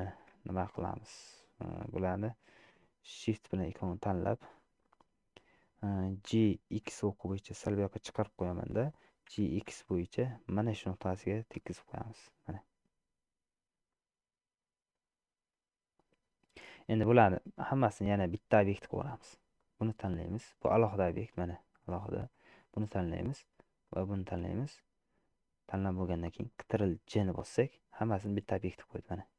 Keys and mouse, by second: 0.2 shift+middle click, 2.2 shift+click, 4.9 middle click, 6.5 g, 9.5 g, 14.1-16.8 middle drag, 17.7 middle click, 18.8 middle click, 27.4 ctrl+j.